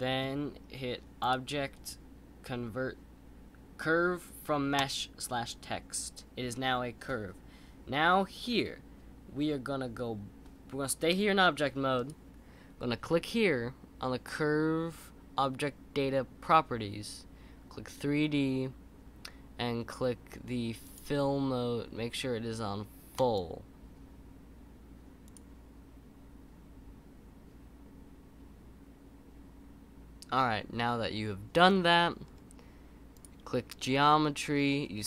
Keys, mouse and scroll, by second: 1.2-4.3 drag, 11.9 click, 20.8-24.0 drag, 32.2-33.1 scroll down 2, 33.1-34.0 drag, 34.0-35.0 scroll down 4.